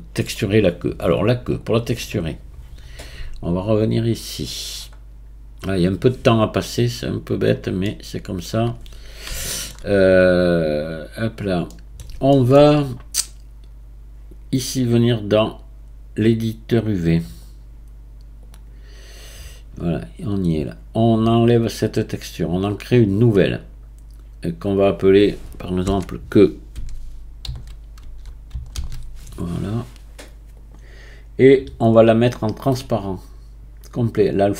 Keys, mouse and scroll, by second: 0.9-1.6 scroll down 4, 1.6 click, 2.2-2.7 scroll down 1, 2.7-3.4 scroll down 6, 3.4-5.7 scroll down 17, 5.7 click, 7.8-10.8 middle drag, 10.8-11.7 drag, 11.7-15.4 middle drag, 15.5-19.8 drag, 19.8-21.7 scroll up 6, 21.7-25.9 drag.